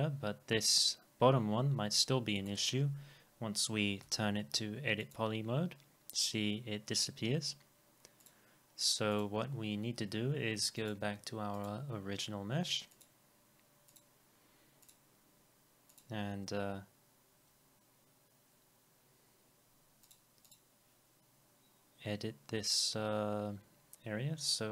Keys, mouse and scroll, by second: 4.1 e, 20.5 double click, 23.5-23.9 scroll up 1.